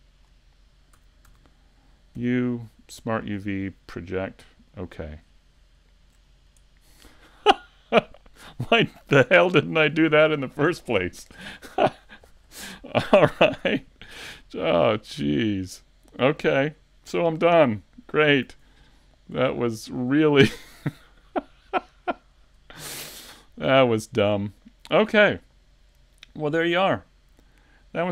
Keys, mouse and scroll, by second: 7.6 shift+middle click, 7.6 scroll down 2.